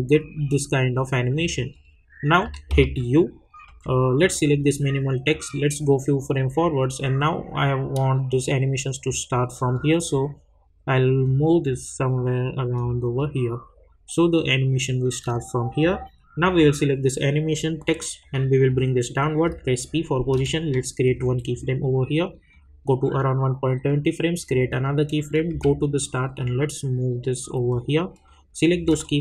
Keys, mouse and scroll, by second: 2.8 u, 3.7 u, 4.2-19.4 drag, 19.4 p, 21.0 click, 25.5 j, 26.6-27.9 drag.